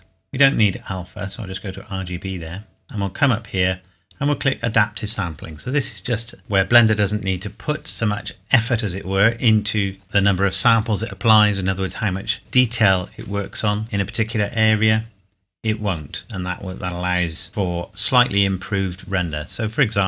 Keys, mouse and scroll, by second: 1.2 click, 2.8 click, 5.1 click, 17.5 click, 19.5 scroll down 1.